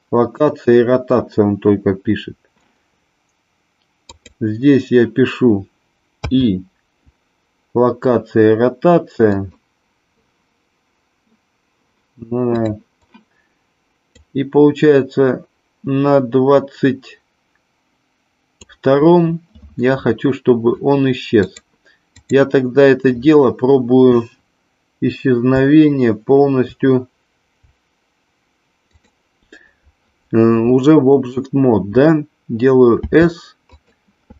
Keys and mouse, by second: 4.0 click, 9.1 click, 14.1-18.6 drag, 21.5 click, 33.0 s, 33.7 click.